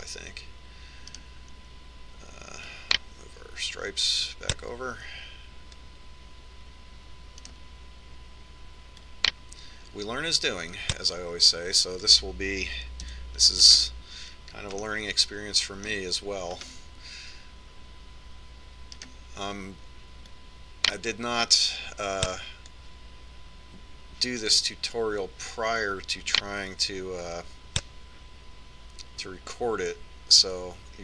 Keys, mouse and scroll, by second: 2.9-4.7 right drag, 4.4-6.1 drag, 6.2 click, 9.2 right click, 10.7-12.5 drag, 14.9 KP_3, 15.4-17.2 middle drag, 18.4-20.4 middle drag, 20.8-23.2 right drag, 22.1-24.0 drag, 26.3 right click, 27.7-29.3 drag.